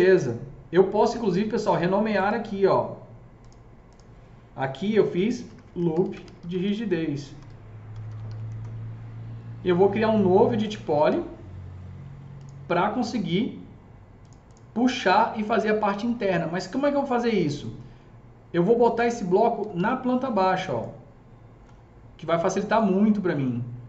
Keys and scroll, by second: 4.7-8.9 typing, 19.3-21.0 typing.